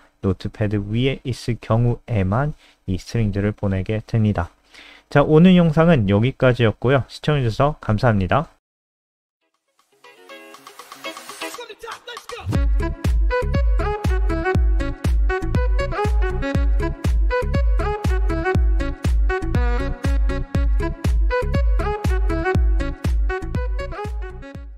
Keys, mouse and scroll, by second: 0.6 alt+F4, 1.0 n, 1.4 click.